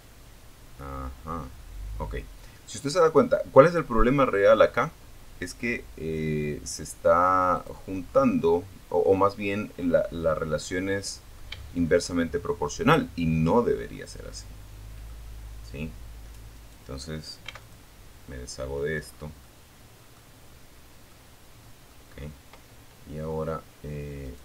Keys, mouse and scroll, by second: 5.8 click, 6.3-7.6 middle drag, 7.6 scroll up 1, 7.9-8.2 scroll down 2, 8.9 middle click, 9.8 shift+middle click, 11.8-12.1 scroll down 2, 12.1-13.4 middle drag, 13.8-14.2 scroll down 2, 14.8 right click, 15.6 x, 15.8 click, 16.7 scroll down 2, 17.2-17.6 scroll up 1, 17.6 middle click, 19.3 middle click, 22.4 right click, 24.0-24.4 scroll down 4.